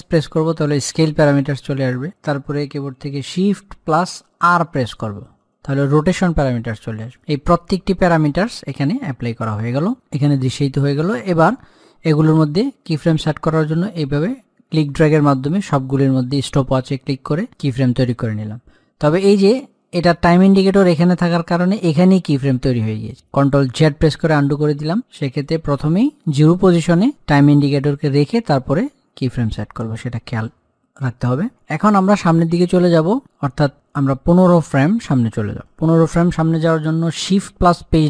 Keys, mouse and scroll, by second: 0.2 shift+s, 4.4 shift+s, 14.0-17.5 drag, 23.4 ctrl+Num_Lock, 24.2 ctrl+z, 25.2-31.7 drag.